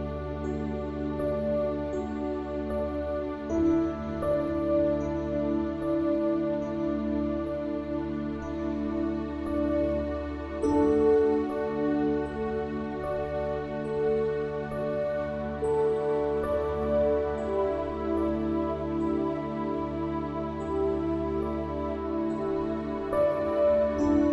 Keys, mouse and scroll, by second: 3.6-6.1 middle drag, 7.1 ctrl+KP_Add, 11.9 click, 15.7 Tab, 18.3 Tab, 19.4 ctrl+r, 21.3 click, 23.0 ctrl+r.